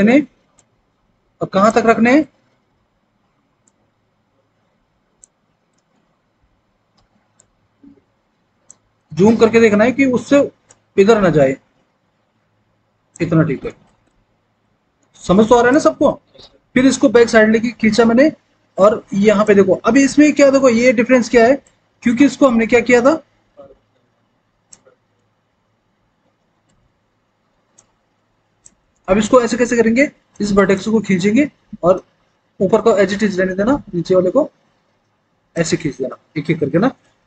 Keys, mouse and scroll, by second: 21.6-24.6 drag, 27.6 click, 29.4-31.8 scroll down 1.